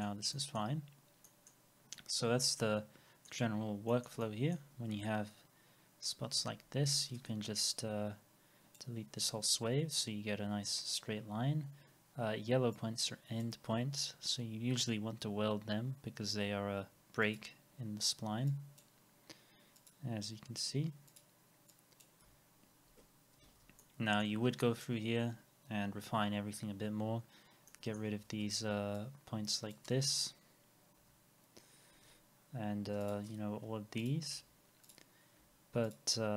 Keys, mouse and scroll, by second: 0.3 alt+middle click, 0.8 scroll down 1, 1.3 middle click, 2.5 alt+middle click, 3.5 scroll, 3.6 alt+middle click, 3.6 scroll up 1, 3.9 middle click, 4.2 alt+middle click, 5.1-5.5 scroll up 1, 6.4 alt+x, 9.3 Delete, 11.2 scroll up 1, 14.8 scroll down 1, 22.3 Delete, 22.7 scroll down 1, 23.5 alt+x, 23.8 alt+middle click, 24.6-25.0 scroll up 1, 25.3 scroll down 1, 27.1-27.5 scroll up 1, 27.7 alt+middle click, 30.9 Delete, 33.7 Delete.